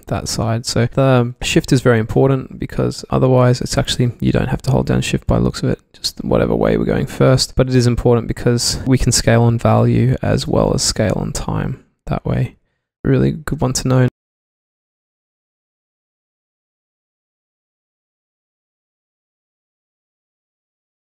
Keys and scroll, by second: 3.5 super+z, 4.7 super+z, 7.3 super+z, 10.4 super+z.